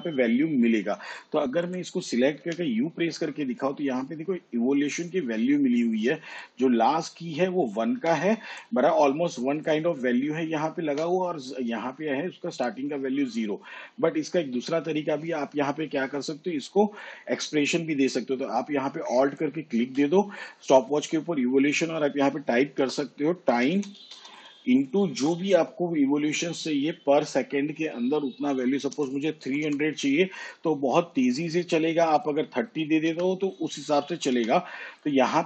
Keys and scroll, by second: 2.6 u, 22.2-25.2 typing, 29.1 3, 29.6 0, 33.2 BackSpace, 34.5 3.